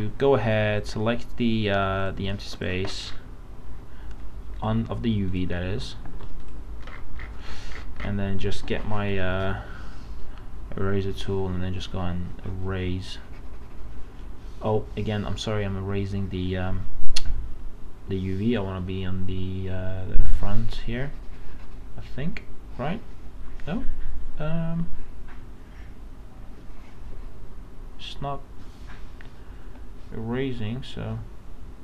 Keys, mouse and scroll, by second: 3.0 scroll up 1, 4.6 click, 6.1 ctrl+d, 6.4 click, 6.9 scroll up 1, 10.9-31.8 drag.